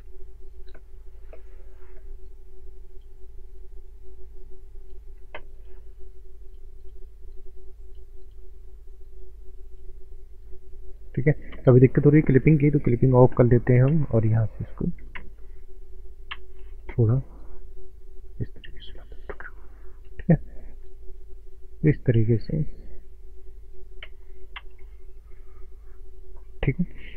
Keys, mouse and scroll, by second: 0.2 shift+middle click, 0.9 shift+middle click, 1.7 click, 11.5 ctrl+space, 12.8 click, 13.8 space, 15.2 space, 17.4 click, 24.0 ctrl+space, 24.9 middle click.